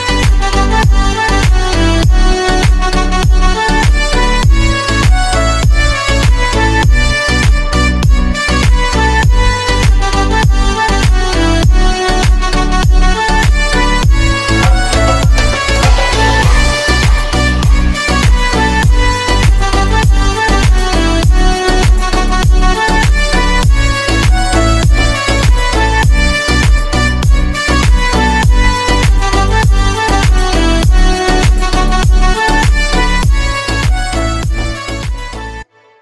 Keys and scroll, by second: 7.9 Delete, 9.2 F3, 9.7 Escape.